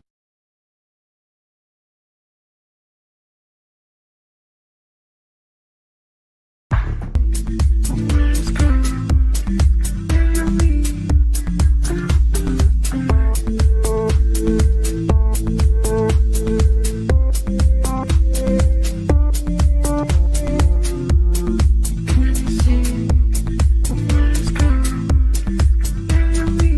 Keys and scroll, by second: 1.8 shift+Page_Down, 2.1 ctrl+Page_Up, 23.0 shift+F2, 23.5 Escape.